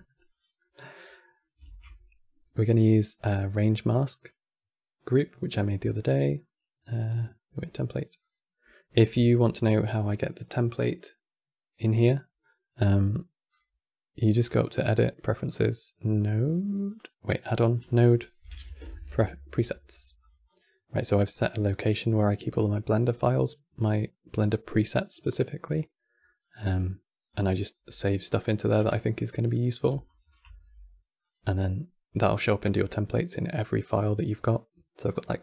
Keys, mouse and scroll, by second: 0.3-0.6 middle drag, 0.6 scroll up 2, 0.9-1.3 middle drag, 1.3 shift+a, 13.2 click, 14.1-17.1 drag, 29.2-30.2 middle drag, 30.2 shift+a.